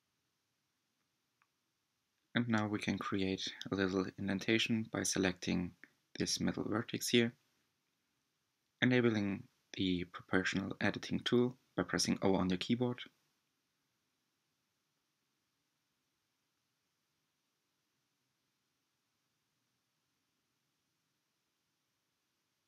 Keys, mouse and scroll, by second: 0.4-1.4 scroll up 7, 2.2 click, 3.6 click, 5.4 g, 11.7-12.2 scroll up 5, 13.0 2, 13.8 alt+click, 15.2 g, 17.4 click, 18.5 g, 22.3 Tab.